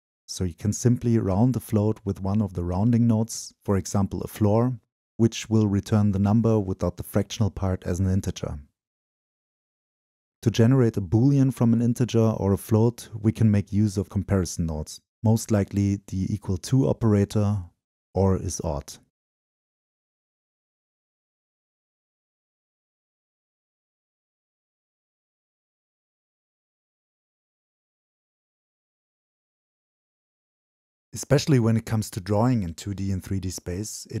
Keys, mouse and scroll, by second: 0.5-0.9 scroll up 2, 0.9-1.6 right drag, 1.6-3.3 drag, 3.3 Return, 5.1-7.6 drag, 7.8 right click, 8.5-16.8 drag, 16.8 middle click, 16.8-17.2 scroll down 2, 17.2-22.9 drag, 22.9 Return, 25.5-25.9 scroll down 2, 27.3 scroll down 2, 28.7-29.7 scroll down 2, 32.7-34.2 drag.